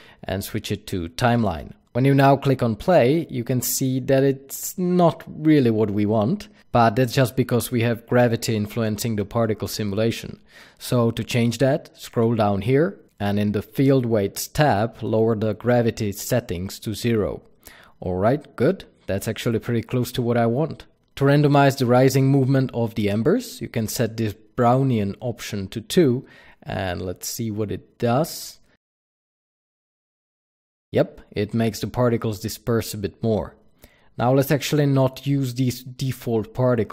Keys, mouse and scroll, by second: 0.0-2.0 drag, 2.5 click, 10.7-13.0 scroll down 1, 13.0 click, 14.1-20.6 drag, 14.8 KP_Enter, 21.5-21.9 scroll up 1, 21.9 KP_Enter, 21.9-29.6 drag, 29.9 click.